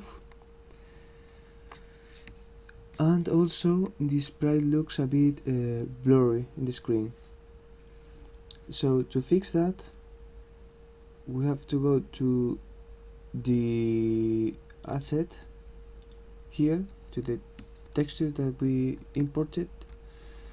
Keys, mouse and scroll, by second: 9.9 click, 14.9 click, 15.1 click, 16.0 click.